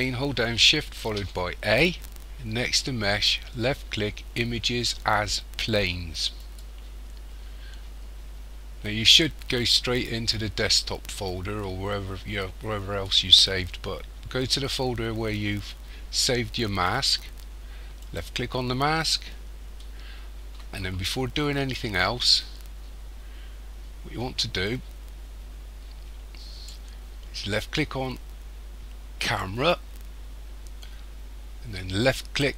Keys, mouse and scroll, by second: 1.0 shift+a.